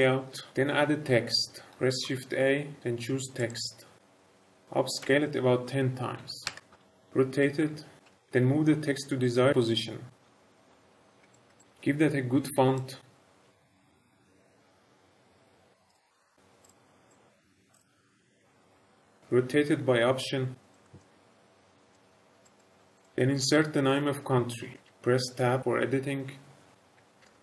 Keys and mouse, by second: 1.7 shift+a, 5.0 s, 6.1 KP_1, 6.4 KP_0, 6.7 Return, 7.5 r, 7.9 x, 8.0 KP_9, 8.1 Return, 8.1 KP_0, 9.5-11.4 typing, 10.5 click, 10.6 shift+middle drag, 10.8 shift+middle click, 11.0 shift+middle click, 11.2 click, 12.6 click, 15.8 click, 17.0 click, 18.5 r, 18.7 x, 20.8 middle click, 20.9 shift+middle click, 21.1 middle drag, 23.8 Tab, 24.7 BackSpace, 24.8 BackSpace, 24.8 n, 24.8 BackSpace, 24.8 Tab, 24.9 Tab, 26.9-27.4 typing.